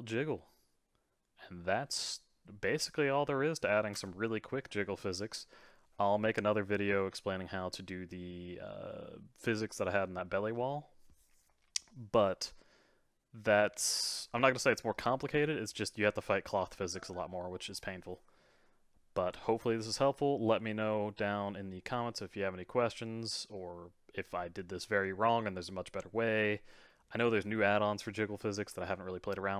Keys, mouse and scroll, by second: 3.9 space, 12.3-15.3 middle drag.